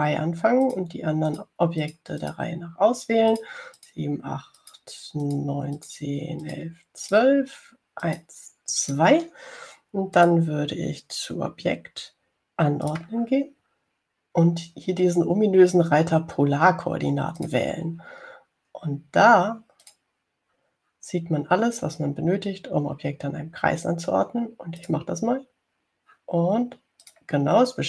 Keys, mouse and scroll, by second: 1.9 shift+click, 2.5 shift+click, 3.1 shift+click, 4.6 shift+click, 5.1 shift+click, 5.8 shift+click, 6.5 shift+click, 7.0 shift+click, 7.7 shift+click, 8.3 shift+click, 9.3 shift+click, 10.1 shift+click, 11.4 click, 14.1 click, 18.6 click, 21.1 click, 26.1 click.